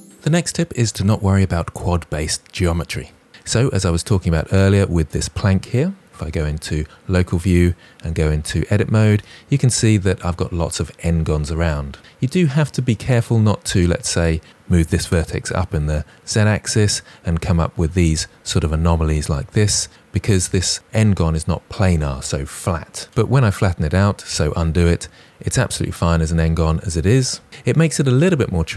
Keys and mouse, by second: 6.2 KP_Divide, 7.9 Tab, 14.6 g, 15.0 z, 16.2 click, 23.4 ctrl+z.